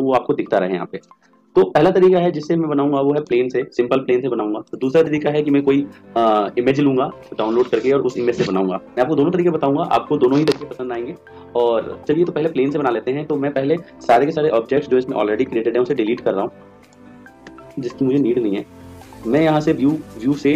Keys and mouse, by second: 3.2 click, 4.2 x, 5.7-7.1 right drag, 14.4 x, 15.5 x, 16.9-18.3 right drag, 17.5 x, 20.1 click.